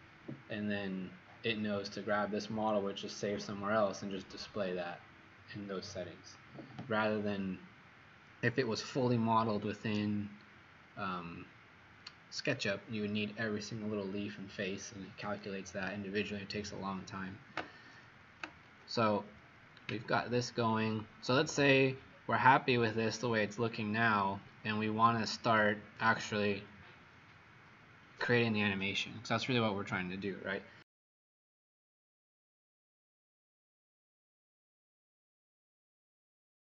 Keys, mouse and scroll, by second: 20.3 middle click.